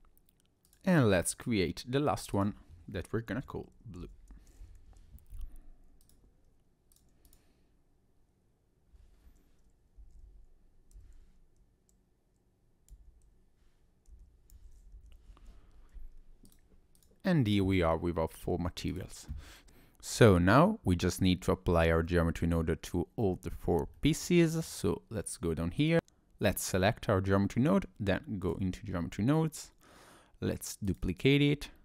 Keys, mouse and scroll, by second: 0.7 click, 1.4 click, 2.2 click, 2.4 click, 6.0 click, 16.5 click, 17.0 click, 17.8 scroll down 2, 18.5 scroll up 1, 18.9 click, 22.2 middle click, 23.9 shift+middle click, 25.8 click.